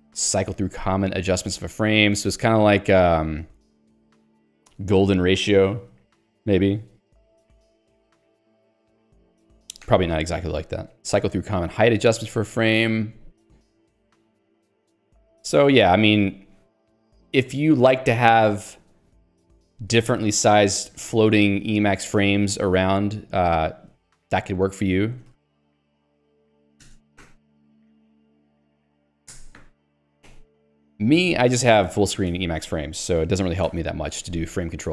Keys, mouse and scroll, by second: 1.2 k, 2.8 shift+v, 3.3 j, 9.8 ctrl+g, 10.1 Escape, 10.9 j, 12.1 ctrl+d, 13.0 ctrl+u, 13.7 ctrl+d, 20.1 ctrl+g, 25.0-29.5 typing, 30.0 Escape, 31.0 ctrl+g, 31.2 Escape, 32.2 click, 32.4 Escape.